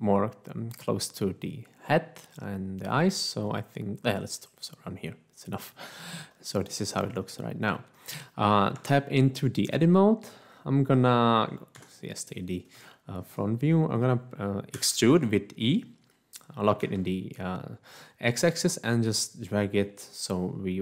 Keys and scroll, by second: 8.8 Tab, 11.7 1, 14.7 e, 16.9 x, 19.8 x.